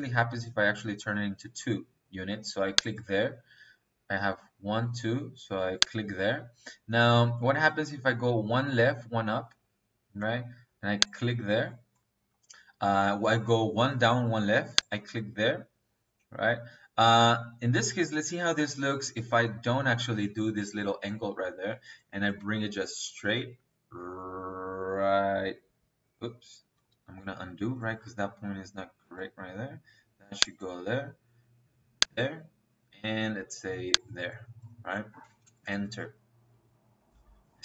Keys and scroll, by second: 29.1 ctrl+z, 35.0 space.